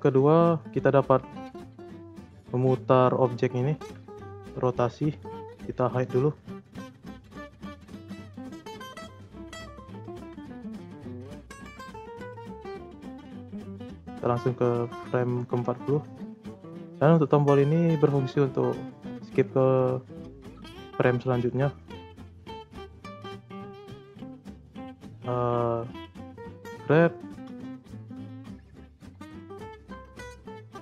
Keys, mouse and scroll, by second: 2.8 g, 4.9 scroll down 2, 5.2 click, 6.8-7.9 scroll up 1, 7.9 h, 9.1 click, 9.8 shift+scroll up 2, 9.9-10.5 shift+middle drag, 10.5 click, 11.2-13.6 drag, 15.7-23.5 drag, 23.5-24.2 scroll down 2, 24.2-25.1 shift+middle drag, 25.1 g, 28.1 shift+s, 28.7 r.